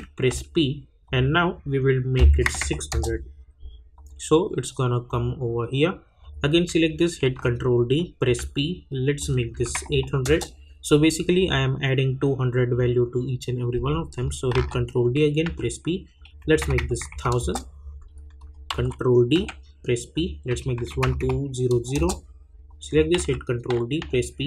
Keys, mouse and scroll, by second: 0.3 p, 1.0 click, 2.9 Return, 3.9 click, 7.2 ctrl+d, 8.2 p, 9.2 click, 10.2 Return, 11.3 click, 14.5 ctrl+d, 15.4 p, 16.1 click, 17.3 Return, 18.4 click, 18.7 ctrl+d, 19.3 p, 20.1 click, 21.9 Return, 22.7 click, 23.1 ctrl+d, 24.0 p.